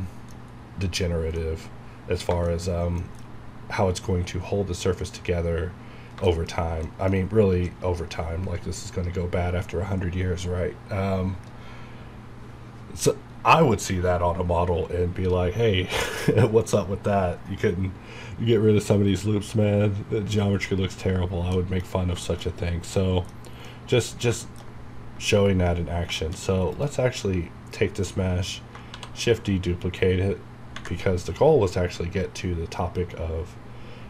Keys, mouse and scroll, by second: 0.3 scroll down 1, 1.4 middle click, 2.7 scroll up 1, 3.0 middle click, 3.2 scroll up 1, 5.3 scroll down 2, 6.3 shift+middle click, 6.5 scroll down 3, 6.8 middle click, 9.1 scroll up 1, 20.8 scroll down 1, 21.5 middle click, 21.9 scroll down 1, 22.2 shift+middle click, 22.5 scroll up 1, 22.9 middle click, 23.6 scroll up 1, 23.7 middle click, 23.9 scroll down 1, 24.4 shift+middle click, 25.4-26.1 scroll down 2, 26.4 shift+scroll up 1, 26.7 click, 27.3-28.7 scroll down 1.